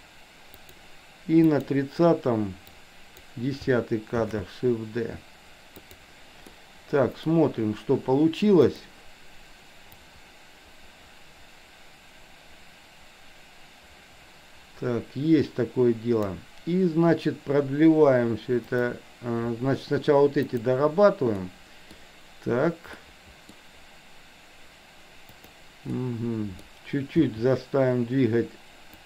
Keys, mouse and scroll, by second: 1.5 click, 2.8-3.3 drag, 4.4 shift+d, 6.5 middle click, 8.7 click, 10.0-16.4 drag, 20.5 click, 21.4-22.0 middle drag, 23.0-23.4 middle drag, 25.3 click, 25.9-26.7 middle drag, 27.2 r.